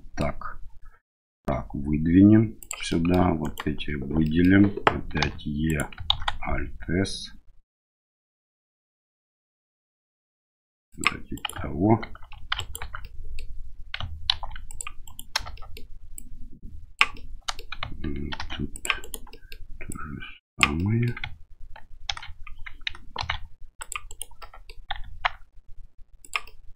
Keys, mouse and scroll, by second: 1.3 e, 2.9 middle click, 3.4 alt+right click, 4.2 middle click, 5.2 e, 6.1 alt+s, 11.3 right click, 12.3 2, 12.5 alt+right click, 13.0 middle click, 14.3 ctrl+r, 15.6 middle click, 16.2 click, 17.2 middle click, 18.3 ctrl+r, 19.4 middle click, 19.9 click, 20.8 right click, 22.0 ctrl+e, 23.2 ctrl+r, 24.4 click, 24.4 right click, 24.7 middle click, 24.9 s, 26.5 middle click.